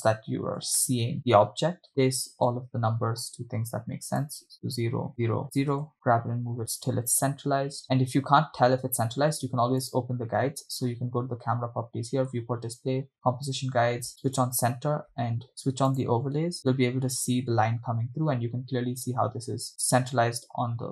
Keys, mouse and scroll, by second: 1.5 shift+middle click, 2.6 click, 4.4-6.2 drag, 6.1 shift+middle click, 9.8 click, 12.3-12.8 scroll down 2, 13.2 drag, 13.4-14.0 scroll down 1, 14.0-14.5 scroll down 1, 14.6-15.0 drag, 16.6-17.0 drag.